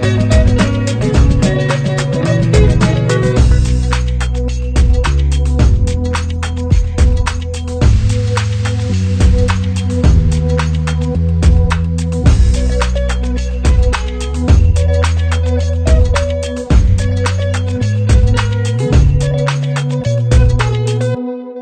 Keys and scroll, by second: 12.0 ctrl+z.